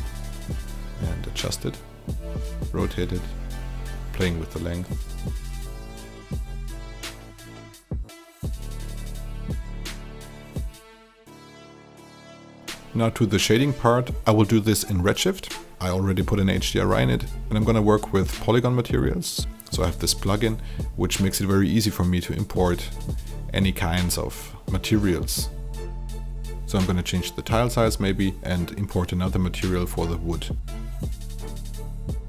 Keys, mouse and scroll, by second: 0.1 click, 0.6-2.2 alt+drag, 2.5 KP_4, 2.8 KP_5, 3.1 w, 3.3 click, 3.9 middle click, 4.2 alt+right click, 4.3 alt+middle click, 4.7 click, 5.1 alt+right click, 5.4 click, 5.9 KP_4, 6.2 KP_5, 6.4 click, 7.3 middle click, 7.5 alt+click, 8.2 click, 8.6 alt+middle click, 8.7 alt+right click, 8.7 alt+click, 8.9 alt+middle click, 9.1 alt+r, 9.4 w, 9.6 click, 10.2 alt+click, 10.7 click, 11.0 alt+click, 11.7 click, 11.9 alt+click, 12.4 alt+right click, 12.4 alt+middle click, 14.2 click, 28.2 click, 29.8 KP_2, 30.0 click, 30.1 KP_2, 30.2 Return, 32.1-32.2 drag.